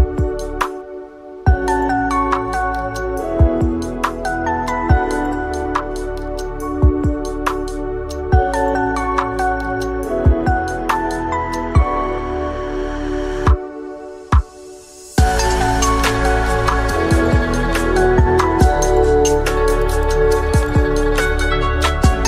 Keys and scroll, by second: 0.8 8, 2.7 1, 2.8 Return, 4.3 ctrl+z, 6.4 F2, 8.5 Return, 8.5 0, 9.7 typing, 12.6-13.3 typing.